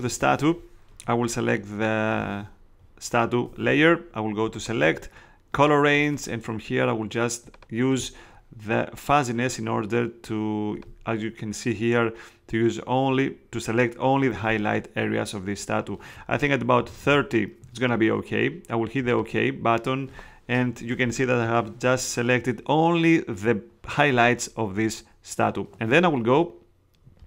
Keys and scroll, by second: 16.5-17.5 typing.